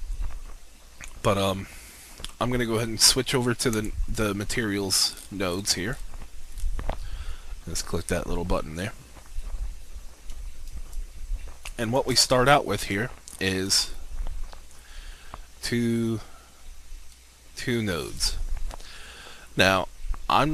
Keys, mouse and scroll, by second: 4.8-5.8 scroll up 1, 11.0 alt+shift+click, 12.8-14.4 drag, 18.2 click.